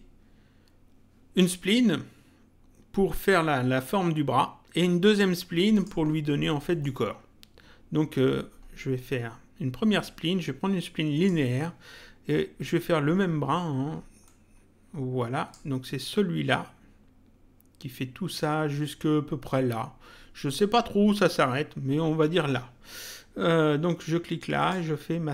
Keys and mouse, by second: 5.7 click, 6.6 middle click, 10.0 click, 14.2 click, 24.5 click.